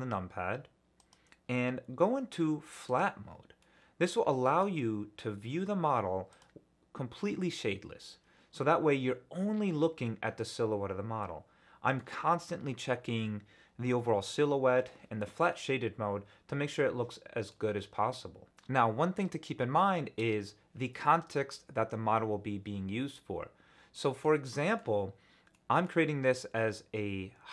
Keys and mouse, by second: 1.0-3.3 drag, 3.6-4.6 middle drag, 6.3 click, 8.0-11.9 middle drag, 15.4-17.5 middle drag.